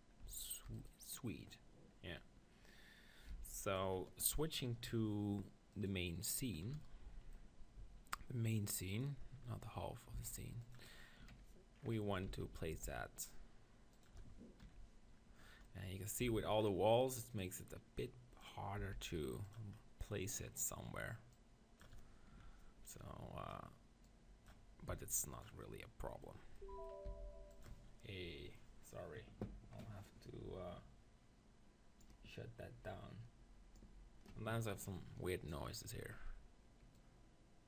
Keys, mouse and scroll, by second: 0.7-2.0 right drag, 2.0 click, 3.3 b, 5.8-7.4 drag, 7.4-10.3 middle drag, 10.1 s, 11.2 KP_3, 12.3 z, 12.5 middle click, 12.7 g, 14.0-15.4 right drag, 15.4 click, 16.3 z, 17.4-19.2 drag, 18.8 s, 21.3-22.3 drag, 24.9 s, 27.0 s, 27.6-29.5 drag, 37.0-37.6 drag.